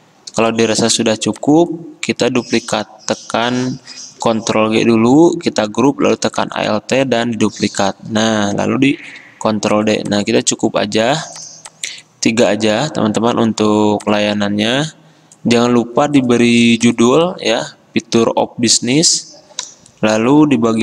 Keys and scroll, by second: 4.3 ctrl+g, 9.1 ctrl+d.